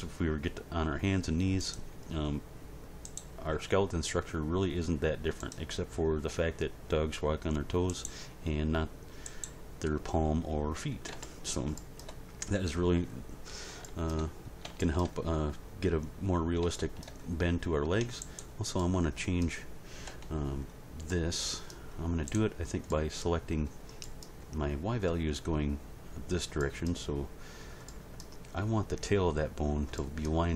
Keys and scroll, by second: 3.5 g, 20.1 End.